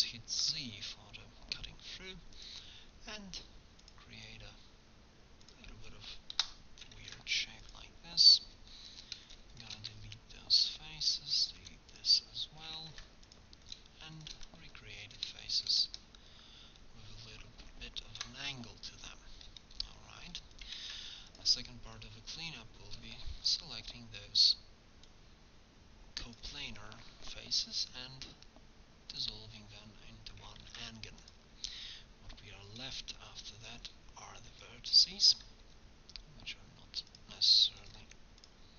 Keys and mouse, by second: 7.0 ctrl+Tab, 10.0 x, 11.6 x, 12.8 ctrl+Tab, 14.6 f, 15.9 f, 18.1 alt+h, 20.8 ctrl+Tab, 23.4 c, 26.5-29.1 drag, 27.6 x, 30.4 click, 30.7 ctrl+Tab, 34.5-36.4 drag, 35.7 x, 37.8 click, 38.1 x, 38.4-38.7 drag.